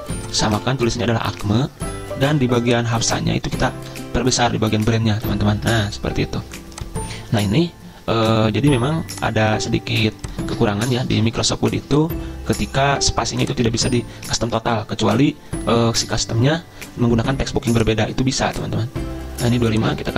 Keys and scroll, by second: 0.2-1.1 typing, 1.3 Return, 3.9 ctrl+], 4.2 ctrl+], 10.7 ctrl+a, 11.1 ctrl+r, 13.8 ctrl+a.